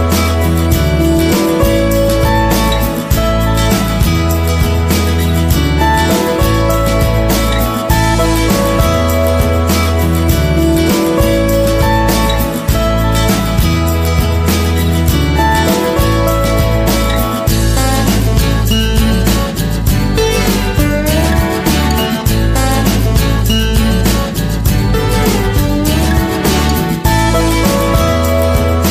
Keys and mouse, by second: 0.9 shift+middle click, 2.3 shift+d, 3.6 KP_3, 4.4 g, 5.6 r, 7.3 s, 8.6 g, 9.6 Tab, 10.1-10.5 middle drag, 11.0-11.3 middle drag, 11.8-12.4 middle drag, 12.6-13.1 middle drag, 13.2-13.7 middle drag, 14.2 right click, 15.6 Tab, 18.6 ctrl+l, 19.7 shift+middle click, 20.2 g, 22.1 right click, 22.8 ctrl+l, 23.6 g, 25.3 shift+middle click, 26.3 ctrl+l, 27.3 g, 28.3 right click.